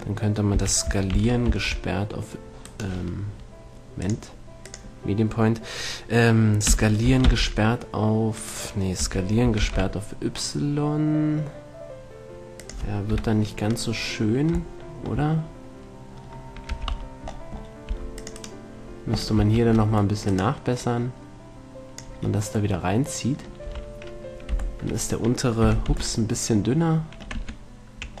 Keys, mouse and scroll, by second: 0.8 s, 3.1-4.9 right drag, 4.4-6.1 drag, 6.9 s, 8.7 right click, 9.3 s, 12.9-14.2 drag, 13.4 KP_7, 17.1 a, 18.1 c, 18.7-21.1 middle drag, 18.7-21.1 right drag, 20.0 c, 21.1-23.1 drag, 23.1 middle click, 23.9 a, 24.8 z, 25.9 z, 26.2 Tab, 27.7 Tab.